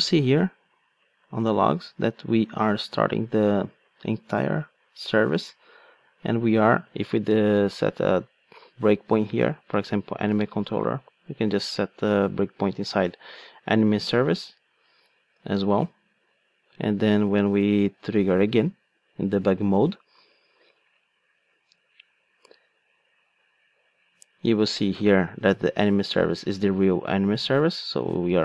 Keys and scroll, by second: 11.9 super+F8, 14.2 super+b, 15.9 super+F8, 17.8 ctrl+d.